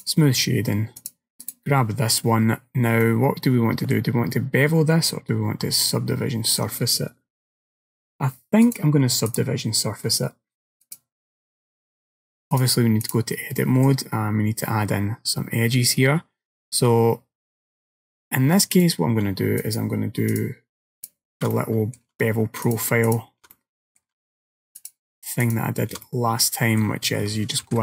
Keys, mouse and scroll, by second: 1.1 click, 1.5 right click, 2.6-3.4 scroll up 4, 3.1 middle click, 4.4 middle click, 8.7 click, 9.3 click, 12.6 click, 13.6 middle click, 18.8 alt+click, 19.7 alt+shift+click, 20.4 alt+click, 21.0 alt+click, 21.6 middle click, 22.7 alt+shift+click, 23.1 alt+shift+click, 23.6 middle click, 24.8 alt+shift+click, 25.5 alt+shift+click, 26.1 middle click, 27.7 ctrl+b.